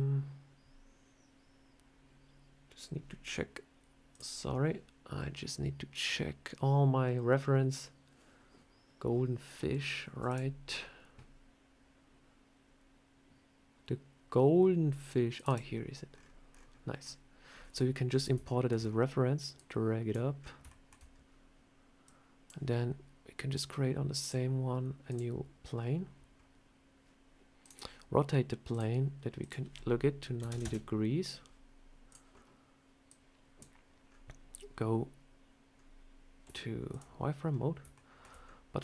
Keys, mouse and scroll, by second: 15.4 click, 15.9-16.5 scroll down 12, 16.5 scroll up 1, 17.5 scroll down 2, 17.9 scroll up 4, 18.3 shift+middle click, 18.6 shift+scroll down 3, 19.4 click, 20.2 scroll up 3, 20.5 shift+middle click, 20.9 scroll down 1, 21.9 click, 23.3 click, 24.1 click, 25.6-26.4 scroll down 5, 27.5 click, 28.6 click, 29.2 click, 31.9 click, 32.2 scroll up 2, 32.9 click, 33.9 scroll up 2, 35.6 scroll up 2, 36.3 z, 37.3 scroll down 2, 37.8 shift+middle click, 38.3 scroll up 2, 38.6 scroll down 2.